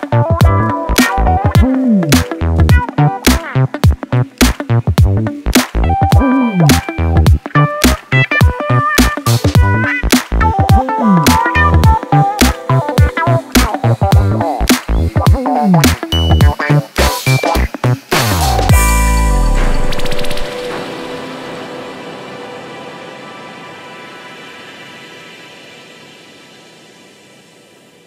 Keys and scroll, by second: 1.4 ctrl+z, 3.0 4, 11.3 ctrl+d, 11.4 Escape, 16.1 3, 16.6 ], 17.3 4.